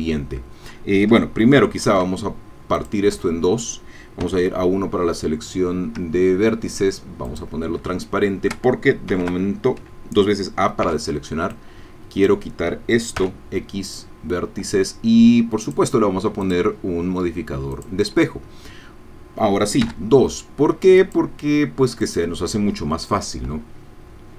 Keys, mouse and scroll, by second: 1.9 ctrl+r, 2.8 click, 3.2 Escape, 4.2 1, 7.3 click, 7.9 shift+middle click, 9.1 a, 10.8 b, 11.5-13.2 drag, 13.2 x, 13.9-15.0 drag, 15.6 click, 16.4 click, 17.9 click, 19.8 2, 21.0-22.4 drag.